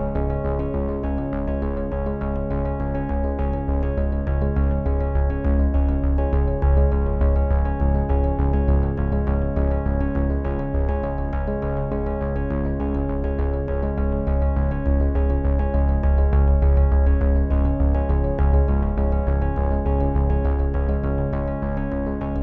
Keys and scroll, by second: 2.3 c, 5.0 ctrl+-, 15.9 v, 16.3 z, 17.5 f, 21.3 f.